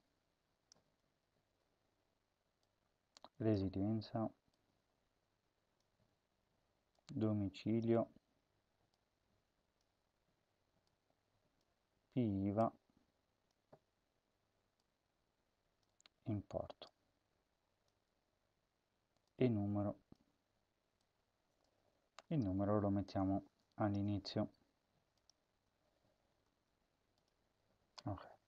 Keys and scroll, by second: 0.8 BackSpace, 3.5 BackSpace, 7.9 BackSpace, 9.8 BackSpace, 11.6 BackSpace, 13.5 BackSpace, 15.9 BackSpace, 20.2 BackSpace, 21.7 BackSpace, 24.3 ctrl+x, 25.4 ctrl+v, 26.3 Return.